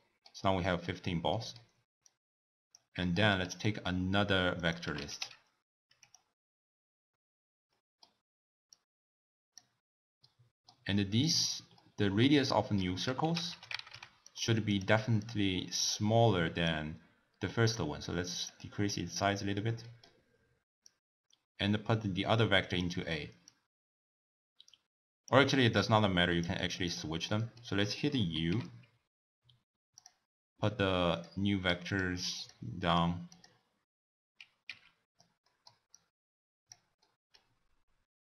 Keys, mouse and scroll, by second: 2.0 click, 3.0-4.5 middle drag, 4.5-7.6 drag, 7.7-8.7 middle drag, 8.7 click, 10.2-11.2 middle drag, 11.2-11.7 drag, 11.7-13.2 middle drag, 13.2 ctrl+a, 15.2 drag, 16.6-18.9 drag, 18.9 middle click, 19.4 scroll down 2, 19.8-20.8 middle drag, 20.8 click, 23.4 click, 25.7 click, 26.9 click, 27.3 middle click, 27.7-28.4 scroll up 1, 28.4 n, 29.9 click, 31.1 drag, 31.8 click, 34.6 n, 35.4-35.9 middle drag, 35.9 click, 36.9 scroll up 1, 37.0-37.5 middle drag, 37.5-37.9 scroll down 3.